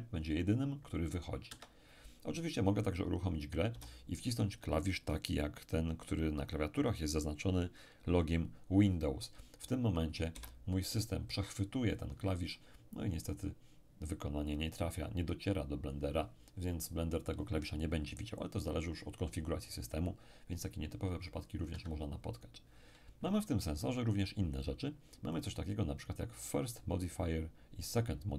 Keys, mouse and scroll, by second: 1.5 Escape, 3.7 p, 21.7 Escape, 25.3 click.